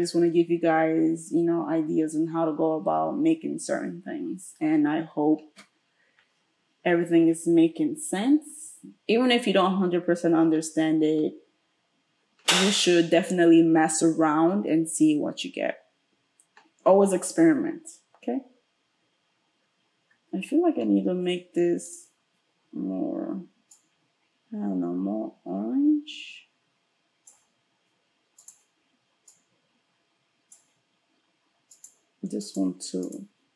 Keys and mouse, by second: 28.4 click, 28.5-31.8 middle drag, 31.8 click, 31.9 middle click, 32.4 click, 33.1-33.5 middle drag.